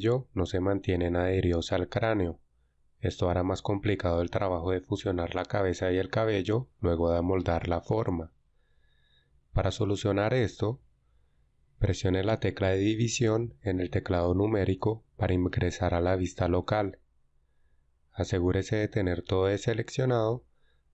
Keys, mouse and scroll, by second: 11.3 ctrl+z, 14.1 KP_Divide, 20.1 a.